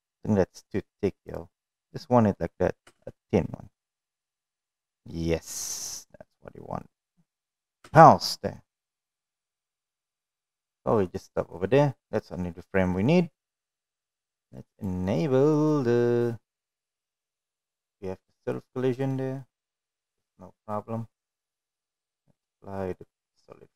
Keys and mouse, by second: 1.5-2.1 middle drag, 2.6 space, 7.7 space, 8.3-8.9 middle drag, 9.3-10.9 middle drag, 14.1 middle drag, 15.0-16.6 middle drag, 17.0-17.8 middle drag, 18.1-18.9 middle drag, 19.6-20.7 middle drag, 21.8 click.